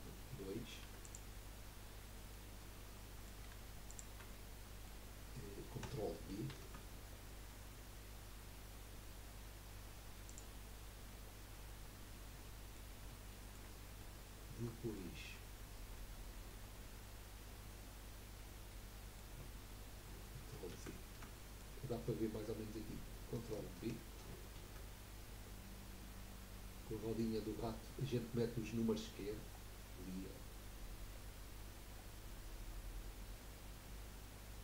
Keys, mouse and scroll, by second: 0.9 2, 1.0 click, 2.3-3.9 middle drag, 3.9 shift+click, 4.3-6.5 middle drag, 6.5 ctrl+b, 12.1-19.7 middle drag, 20.7 ctrl+z, 21.3-24.4 middle drag, 24.5 ctrl+b, 27.6-30.5 drag, 27.6-30.5 right drag.